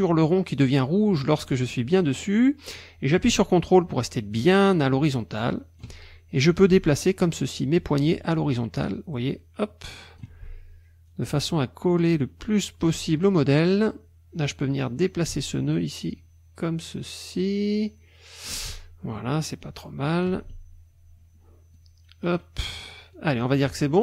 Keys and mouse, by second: 2.2-6.0 drag, 6.7-10.4 ctrl+drag, 11.1-13.0 ctrl+drag, 13.5 click, 15.2-18.6 ctrl+drag, 19.7 ctrl+click, 21.8 ctrl+click, 23.1 ctrl+click.